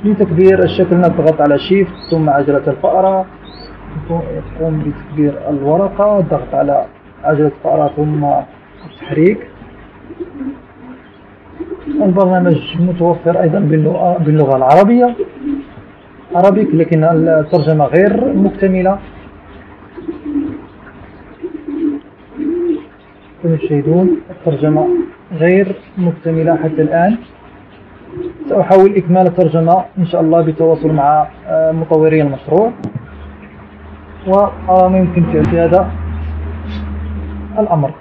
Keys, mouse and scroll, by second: 0.0-1.2 ctrl+drag, 3.6 shift+scroll up 2, 4.1 shift+scroll up 2, 5.2 shift+scroll down 2, 5.9 shift+scroll down 2, 6.8 middle click, 6.8-7.8 scroll, 7.0 click, 7.3 middle click, 8.5-11.2 middle drag, 8.5 scroll, 10.0 scroll, 13.4 click, 14.9 click, 17.2 click, 18.0 click, 19.8 click, 22.0 click.